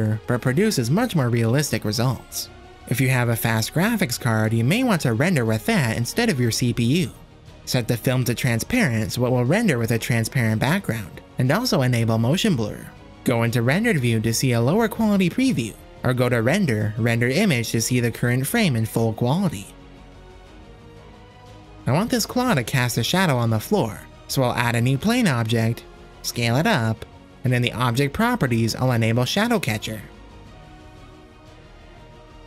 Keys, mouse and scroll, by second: 0.9-2.1 drag, 2.8-3.5 drag, 5.1 click, 5.9 click, 6.7 click, 7.7 click, 8.9 click, 10.2 click, 11.1 click, 13.8 z, 17.7-18.8 drag, 23.7 z, 24.2 shift+a, 27.2 s, 29.0 KP_0, 29.4 click, 30.8 click, 32.1 z.